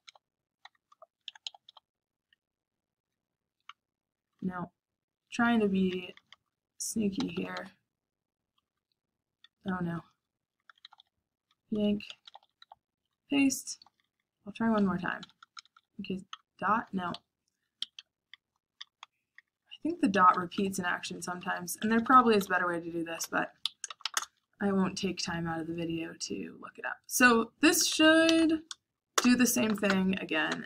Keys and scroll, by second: 0.0-24.5 typing, 5.3 Escape, 17.7 Escape, 27.8 shift+;, 28.3 q, 29.1 Return, 29.6 Up, 29.6 shift+;, 29.8 Up, 30.5 Up.